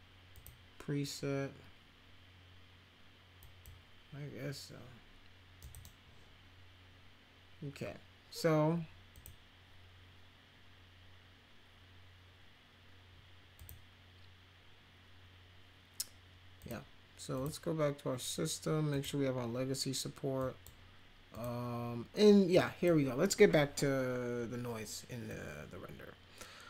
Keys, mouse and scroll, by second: 0.3 click, 3.4 click, 5.6 click, 5.6 right click, 9.2 click, 13.6 click, 16.6 click, 17.4 click, 18.9 click, 20.4 click, 21.4 click, 22.5-22.8 drag, 25.3-26.6 drag.